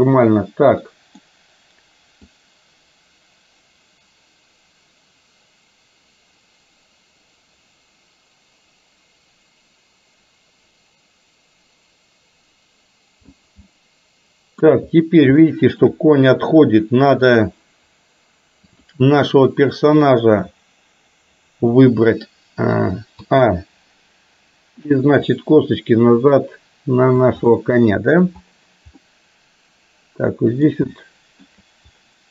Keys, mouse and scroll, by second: 2.4-13.4 drag, 13.7-14.7 middle drag, 15.6 shift+middle click, 17.3 click, 18.8 click, 23.3 a, 25.3-27.3 drag, 27.6-28.3 middle drag, 29.1-30.8 middle drag, 31.1 shift+middle click.